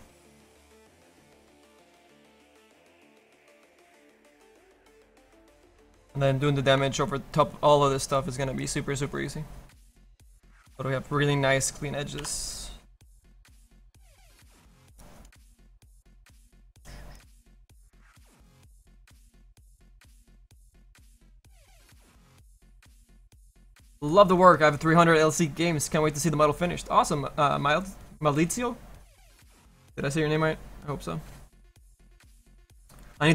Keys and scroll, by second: 12.1 f.